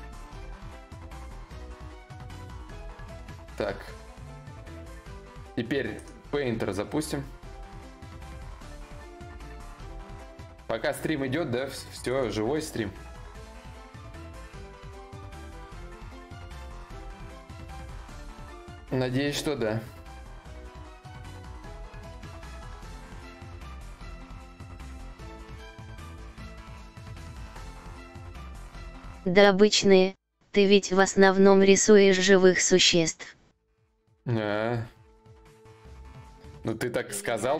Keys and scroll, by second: 25.0 4, 27.0 ctrl+s.